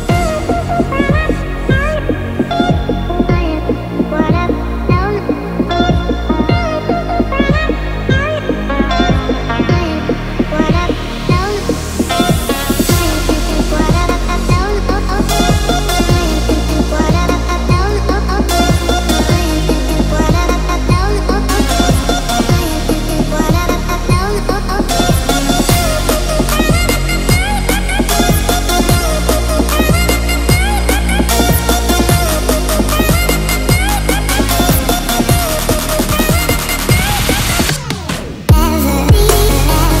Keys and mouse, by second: 0.7 KP_1, 1.9 shift+click, 3.0 shift+a, 5.6 Tab, 6.1 s, 7.6-8.2 middle drag, 8.4 Tab, 9.1 click, 9.8 KP_1, 11.7 shift+Tab, 12.6-13.6 drag, 15.0-16.2 drag, 16.4 shift+middle click, 16.5 shift+middle click, 16.6 shift+click, 16.8 g, 17.5 shift+click, 17.6 g, 19.3 ctrl+s, 19.6 a, 19.7 a, 20.1 alt+z, 20.7 drag, 21.1 alt+z, 21.4 click, 22.0 shift+click, 22.4 click, 22.7 click, 23.5 shift+click, 25.2 click, 26.1 shift+drag, 27.2 shift+drag, 28.0 shift+a, 32.1 s, 33.1 click, 33.5 shift+Tab, 33.8 g, 35.2 z, 38.6 click, 39.2-40.0 drag.